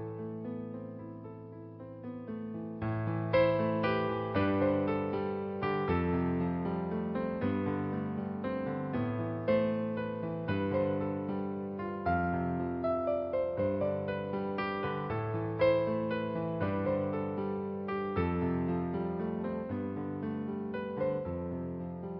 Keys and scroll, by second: 4.8 space, 5.9-8.9 typing, 9.9 ctrl+alt+z, 10.3 b, 11.4-12.4 typing, 14.0-16.4 typing, 16.8 ctrl+z, 17.5-18.9 typing, 20.4-22.1 typing.